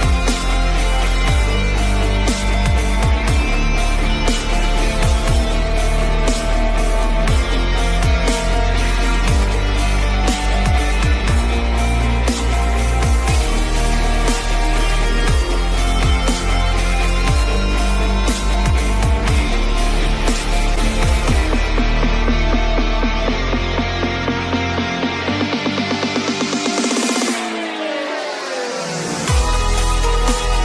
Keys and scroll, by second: 7.0 ctrl+d, 17.9 alt+Delete, 27.1 ctrl+alt+z.